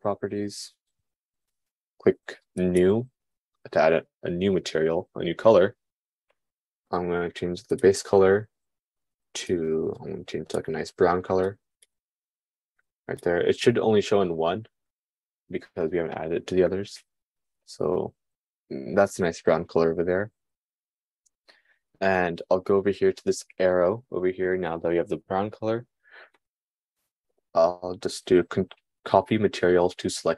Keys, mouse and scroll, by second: 3.2-8.7 drag, 27.3-30.3 drag.